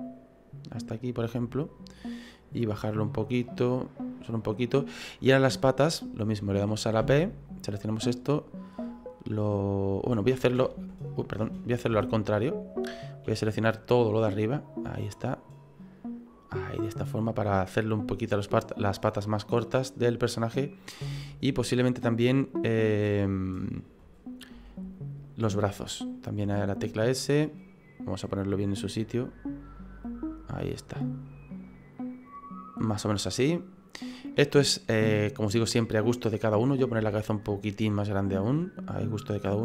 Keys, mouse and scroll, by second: 2.3 click, 4.9 right click, 5.5 right click, 7.0 b, 8.7 click, 10.5 ctrl+z, 10.5 ctrl+x, 11.4 ctrl+z, 11.9 ctrl+z, 13.2 b, 15.8 click, 20.4 right click, 21.0 b, 24.5 s, 26.1 right click, 26.4 s, 28.3 click, 30.0 click, 33.4 middle click, 34.1 middle click, 36.6 right click, 37.0 s, 38.2 click.